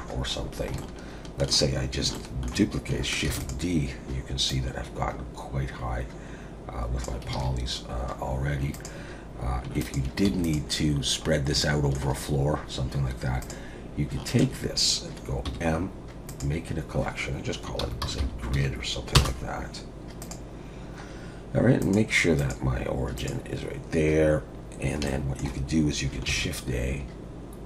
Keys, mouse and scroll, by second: 0.8 shift+middle click, 2.5 shift+middle click, 3.4 shift+d, 4.5 click, 7.3 alt+a, 7.9-8.7 scroll up 3, 8.7 click, 9.8 shift+click, 10.3 x, 11.3-11.6 scroll down 2, 11.6 shift+middle click, 13.1 scroll up 1, 13.4 click, 14.3 shift+click, 15.4 m, 21.8 click, 24.7 scroll down 1, 25.1 shift+middle click, 26.3 shift+a.